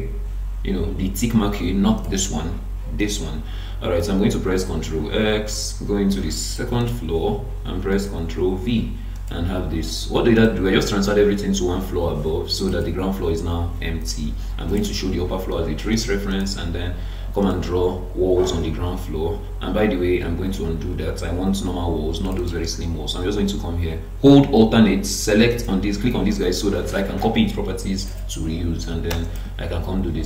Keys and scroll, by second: 4.5 ctrl+x, 7.9 ctrl+v, 20.5 ctrl+z.